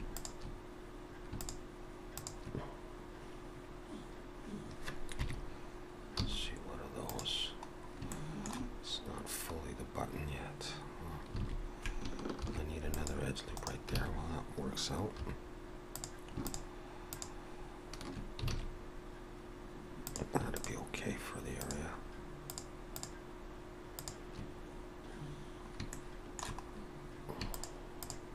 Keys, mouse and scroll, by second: 0.1 shift+click, 1.4 click, 5.2 KP_3, 7.7 scroll up 2, 8.1 shift+middle click, 9.6 scroll up 1, 11.4 alt+a, 12.4 ctrl+r, 14.0 alt+a, 15.2 3, 15.9 click, 16.5 shift+click, 18.5 alt+a, 20.1 click, 20.6 shift+click, 25.3-25.6 scroll down 3, 25.9 shift+middle click, 26.7 scroll up 2, 27.5 shift+click.